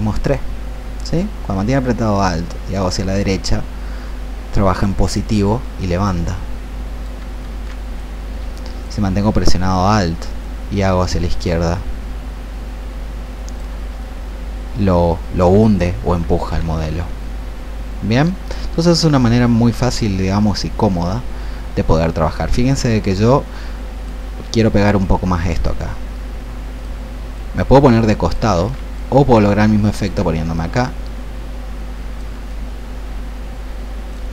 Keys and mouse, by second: 5.6-7.3 drag, 8.0 click, 10.4-13.6 alt+drag, 16.5 ctrl+z, 18.3-28.3 drag, 28.4 ctrl+z, 28.8 click, 30.6 alt+click, 32.4-34.2 drag.